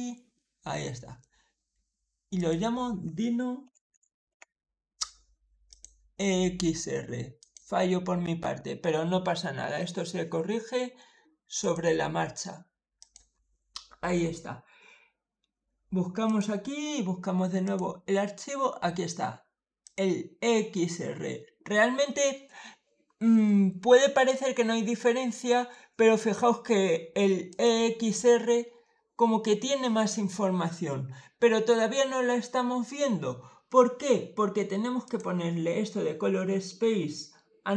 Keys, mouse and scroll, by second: 2.2 click, 2.7-4.6 typing, 5.5 click, 7.2 click, 11.5 click, 12.8 click, 16.1 click, 17.5 click, 19.7 click, 27.4 click, 34.9 click.